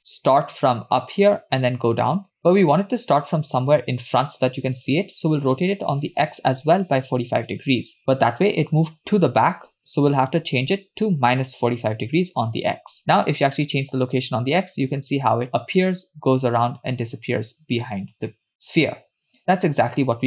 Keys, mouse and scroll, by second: 5.5-7.2 drag, 10.2-11.9 drag, 13.1-20.2 shift+drag.